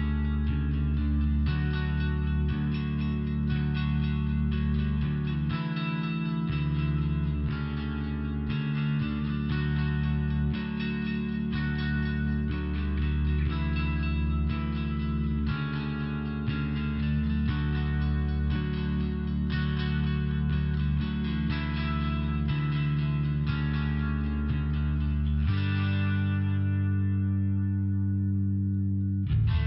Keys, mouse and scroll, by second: 0.2 click, 0.9 click, 1.5 click, 1.6 click, 2.0 click, 2.2 click, 2.5 click, 3.2 click, 3.8 click, 4.6 click, 5.4 click, 6.0 click, 6.3 click, 6.8 click, 8.0 click, 8.5 click, 8.7 double click, 9.3 double click, 9.8 double click, 10.4 click, 10.9 click, 11.5 click, 12.1 click, 12.6 click, 13.1 click, 13.8 click, 14.5 click, 15.2 click, 15.7 click, 16.3 click, 17.0 click, 18.1 click, 18.6 click, 19.1 click, 19.8 click, 20.4 click, 21.0 click, 21.1 click, 22.1 click, 22.6 click, 22.7 double click, 23.1 double click, 23.7 click, 23.8 click, 24.2 click, 24.9 click, 28.3 click.